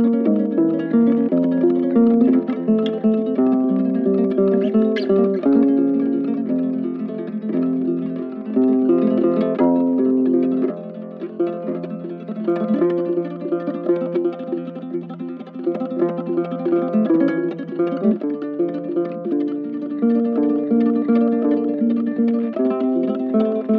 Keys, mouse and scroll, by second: 1.2 right click, 9.5 ctrl+w, 10.4 ctrl+w, 13.1 ctrl+w, 14.3 ctrl+w, 15.6 ctrl+w, 16.6 ctrl+w, 22.3 ctrl+w.